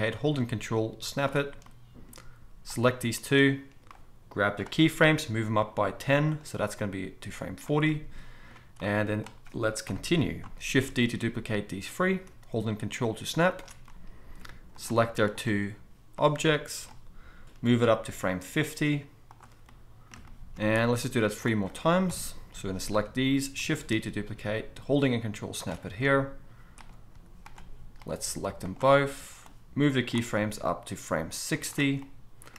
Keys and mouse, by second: 1.2-2.7 ctrl+middle drag, 2.7 click, 2.7-3.9 shift+middle drag, 3.9-6.4 drag, 5.1 g, 6.4-6.7 middle drag, 6.7-13.5 drag, 9.9 KP_7, 11.1 shift+d, 13.5-16.2 ctrl+middle drag, 16.2-19.3 drag, 17.5 g, 19.3-20.9 middle drag, 20.9-25.6 drag, 22.1 KP_7, 22.6 z, 23.9 shift+d, 25.6-29.4 ctrl+middle drag, 27.1 z, 29.4-31.6 drag, 30.3 g, 31.6-32.5 middle drag.